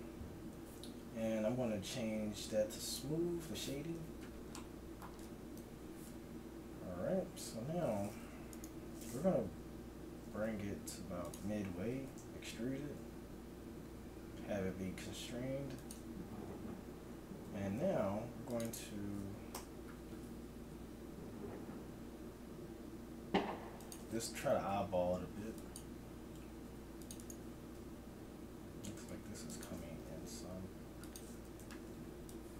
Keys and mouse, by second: 1.0 t, 4.0 Tab, 4.0-5.6 drag, 10.2 g, 13.4 e, 16.3 a, 17.8 ctrl+r, 19.6 t, 21.6 s, 24.4 g, 26.6 ctrl+r, 27.8 s, 30.0 g, 31.4 a, 31.6 z, 32.3-32.5 drag.